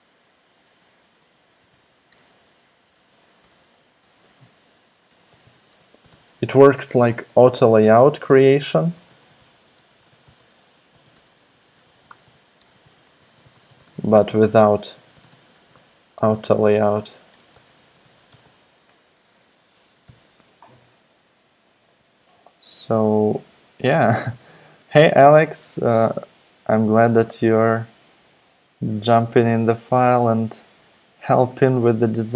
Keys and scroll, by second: 0.9-7.0 typing, 5.3 Return, 8.7-19.9 typing, 20.0 super+s.